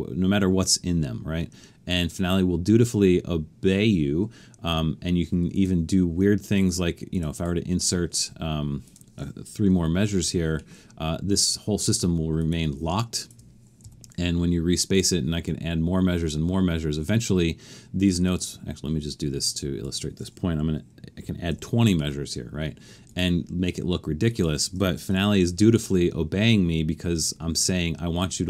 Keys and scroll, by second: 10.0 3, 13.8 shift+4, 21.2-21.5 typing, 25.1 shift+4.